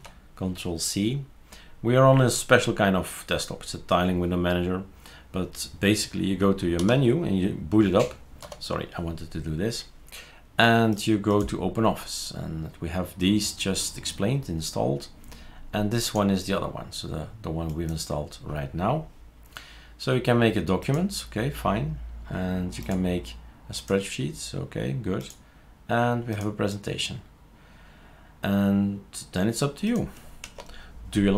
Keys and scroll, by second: 6.8 alt+F4, 8.4 alt+F3, 30.4 shift+super+q.